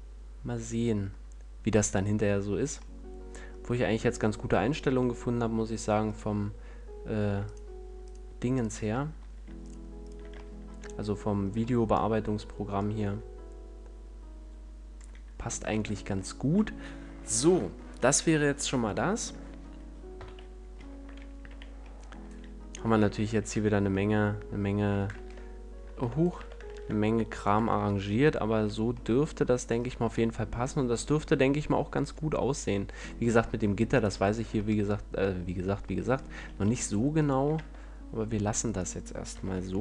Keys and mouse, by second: 4.6-11.6 right drag, 5.0 Tab, 12.7-17.8 middle drag, 15.6 a, 20.1 KP_1, 21.4 z, 23.2 a, 23.5 Tab, 25.1 ctrl+Tab, 26.3 Tab, 27.5 Tab, 28.6 a, 37.5 Tab, 39.4 ctrl+l.